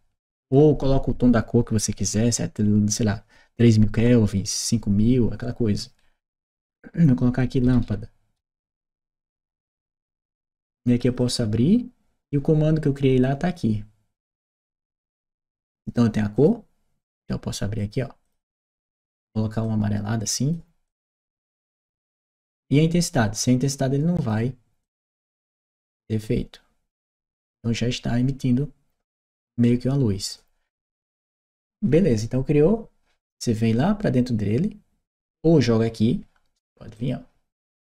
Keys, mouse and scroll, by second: 7.5 shift+l, 9.3 Return, 10.8 click, 11.0 click, 13.9 click, 15.0 click, 16.1 click, 16.9 click, 17.6 click, 18.0 click, 19.4 click, 20.6 click, 22.3 click, 24.0 click, 24.6-26.9 drag, 29.4 click, 31.3 click, 36.7-37.9 drag.